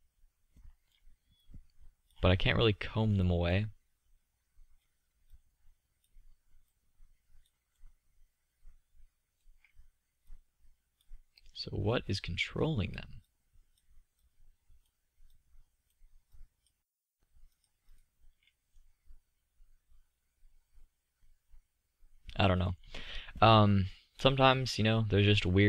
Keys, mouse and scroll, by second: 3.3-4.5 middle drag, 7.6-8.2 drag, 10.0-12.6 drag, 18.2 click, 18.6-19.8 middle drag, 20.8 middle click, 22.6-23.9 middle drag, 24.1 middle click, 25.1-25.6 middle drag.